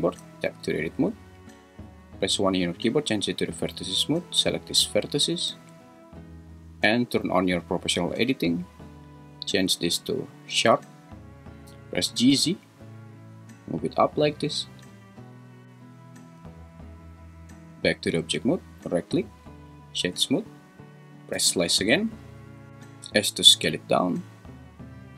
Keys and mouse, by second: 0.2 Tab, 2.3 1, 5.5 `, 9.1-11.2 drag, 11.9 g, 12.3 z, 16.4 Tab, 19.3 right click, 21.3 /, 23.2 s.